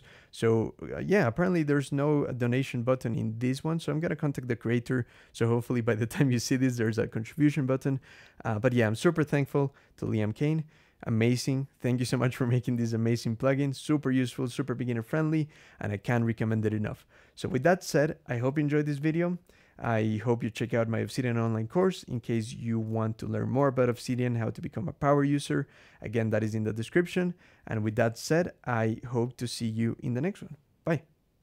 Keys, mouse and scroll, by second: 1.5-4.2 scroll up 12, 18.7 Escape, 19.6 Escape, 20.6 click, 21.9 ctrl+g, 23.4 ctrl+shift+l, 24.7-25.3 scroll up 2.